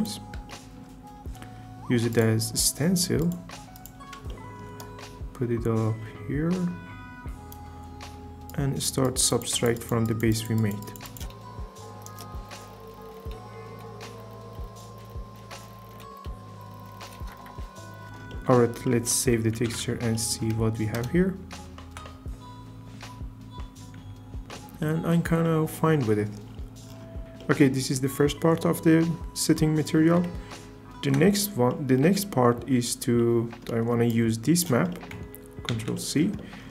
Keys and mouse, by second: 0.5 shift+middle click, 2.1 drag, 3.3-3.8 drag, 4.3 shift+middle click, 4.8 right click, 8.5 click, 10.3 click, 10.6 click, 10.8 click, 11.2 right click, 12.1 shift+f, 12.3 click, 13.1 click, 14.0 click, 15.1 click, 16.7 click, 17.9 click, 18.3-18.9 drag, 20.2 alt+s, 20.9 KP_0, 21.4 z, 24.5 shift+click, 30.3 ctrl+Tab, 34.1 click, 35.7 ctrl+c.